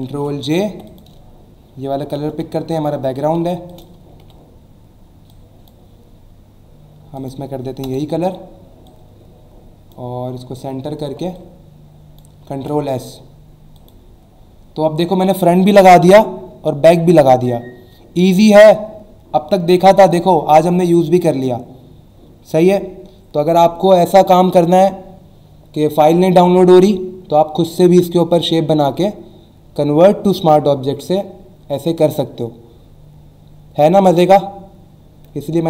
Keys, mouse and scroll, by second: 0.7 v, 0.9 click, 2.1 u, 2.7 click, 3.4 v, 4.2 Delete, 5.3 click, 7.2 click, 7.8 alt+BackSpace, 8.9 click, 10.1 alt+scroll down 1, 10.9 alt+scroll up 1, 11.3 click, 12.5 ctrl+s, 13.7 click.